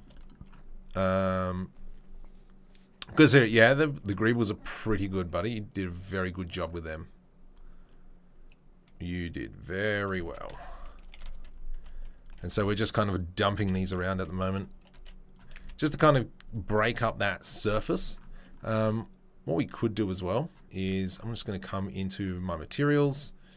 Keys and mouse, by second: 8.4-9.7 drag, 8.4-9.7 middle drag, 10.2 r, 11.7 s, 12.3 g, 13.1-16.5 middle drag, 13.5 g, 14.1 s, 15.5 z, 16.5-22.2 right drag, 22.2-23.0 middle drag, 23.0 right click, 23.1-23.5 middle drag.